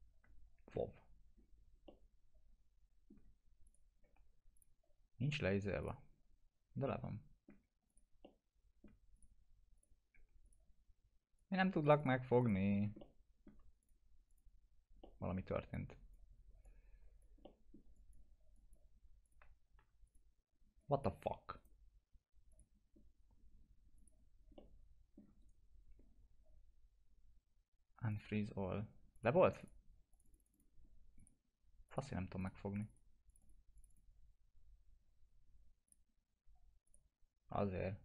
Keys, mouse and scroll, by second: 1.3 scroll down 1, 1.9-3.1 alt+middle drag, 3.7 click, 6.9-7.5 alt+middle click, 7.9 click, 8.2-8.9 alt+middle click, 9.2 click, 10.1 w, 10.5 click, 12.7 scroll down 1, 13.0-13.6 alt+middle click, 13.8 click, 15.0 middle click, 15.3 scroll down 1, 15.7-16.4 click, 16.6-17.3 alt+click, 17.5 alt+middle click, 18.0 alt+click, 19.4 alt+q, 20.1 click, 21.6 right click, 22.5 click, 22.9 scroll up 1, 24.0 click, 24.6-25.2 alt+middle click, 25.4 right click, 28.1 click.